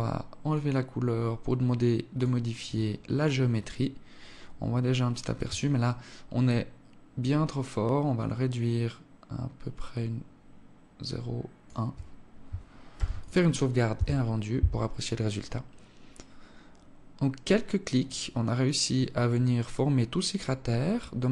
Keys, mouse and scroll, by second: 0.3 click, 1.9 click, 5.6 shift+click, 12.7 ctrl+s.